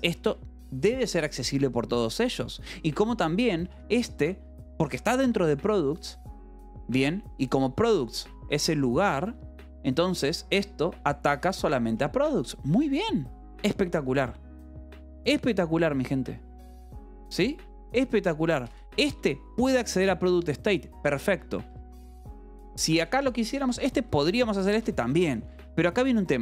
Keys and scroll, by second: 0.7 shift+v, 1.3 Escape, 2.7 j, 3.5 k, 4.2 shift+v, 4.7 Escape, 5.8 shift+v, 7.8-10.1 typing, 11.1 Escape, 11.3 k, 12.9 Escape, 19.1 Escape, 19.3 j, 20.1 shift+v, 21.2 Escape, 21.6 k, 23.1-26.4 typing, 23.6 Escape, 25.0 Escape.